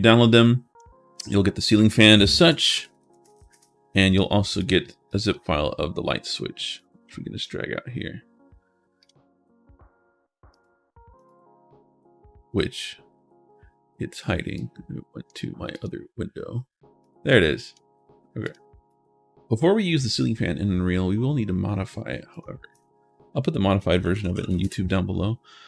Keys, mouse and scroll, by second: 0.2 click, 2.2-3.7 typing, 4.4 click, 4.9 click, 6.6 click, 8.8 click, 10.3 click, 11.0 click, 14.3 click, 15.5 click, 16.8 click, 18.2 click, 19.9 click, 23.7-24.8 typing.